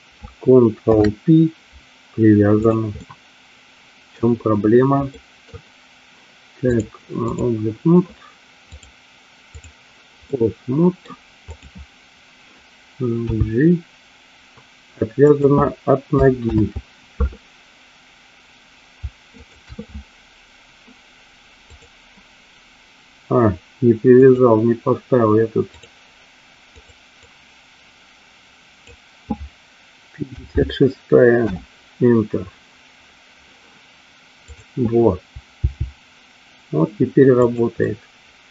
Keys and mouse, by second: 0.9 ctrl+p, 3.0-4.3 middle drag, 5.3 middle click, 6.9 click, 8.8-9.9 drag, 10.4 middle click, 11.6 click, 13.4 g, 16.8 ctrl+z, 19.4 shift+click, 24.3-26.0 drag, 27.0-33.4 drag, 34.6 click, 35.7 g, 37.9-38.5 middle drag.